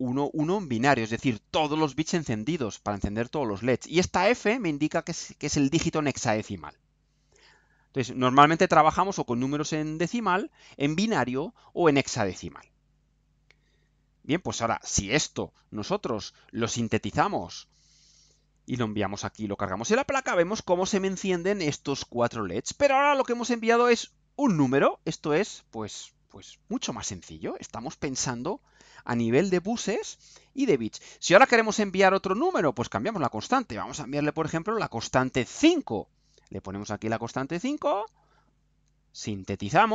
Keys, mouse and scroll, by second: 12.7-13.7 drag, 14.1 Delete, 16.1 ctrl+u, 35.5 click, 37.9 click, 39.4 ctrl+u.